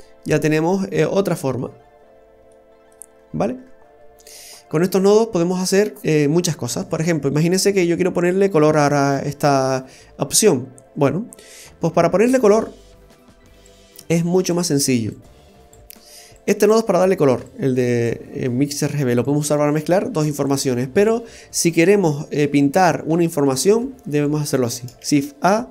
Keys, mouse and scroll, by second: 1.8-2.5 scroll down 1, 2.5 middle click, 2.5-2.9 scroll down 1, 3.1-4.6 scroll down 11, 4.3 middle click, 11.8-13.0 scroll down 2, 12.2 middle click, 13.7 click, 15.1 click, 17.5 click, 25.0 shift+a.